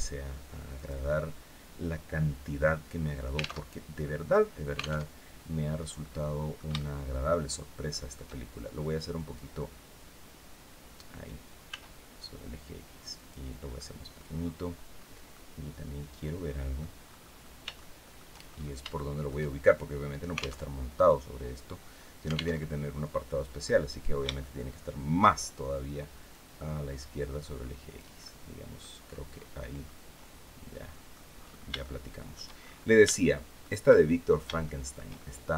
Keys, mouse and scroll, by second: 0.4 click, 3.3 alt+Tab, 4.7 alt+Tab, 5.1-5.5 scroll down 2, 5.7 middle click, 6.5 shift+middle click, 7.4 shift+middle click, 8.8-10.9 drag, 11.4 s, 12.8 click, 13.4 click, 14.1-14.9 scroll down 1, 15.0-16.6 drag, 16.7-17.3 scroll up 1, 17.5 shift+click, 18.1-18.5 shift+scroll up 1, 18.6 shift+middle click, 20.3 alt+Tab, 22.3 alt+Tab, 23.3 middle click, 24.1 shift+scroll up 2, 26.0-27.8 drag, 29.5-31.0 drag, 31.0-31.4 scroll up 2, 31.5 shift+middle click, 32.3-32.7 shift+scroll up 3, 32.8 shift+middle click, 34.3 shift+middle click, 35.2 middle click.